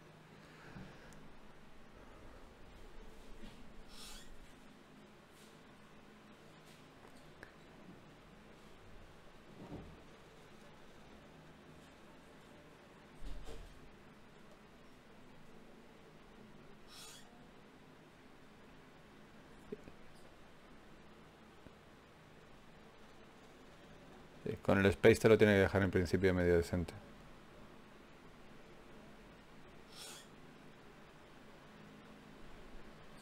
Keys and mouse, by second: 0.9 shift+a, 2.1 Escape, 2.7 shift+q, 6.5-9.5 middle drag, 14.6 z, 15.4 click, 15.6 z, 16.7 g, 21.2 shift+q, 28.0 g, 30.9 g, 32.0 g, 32.5-33.2 drag.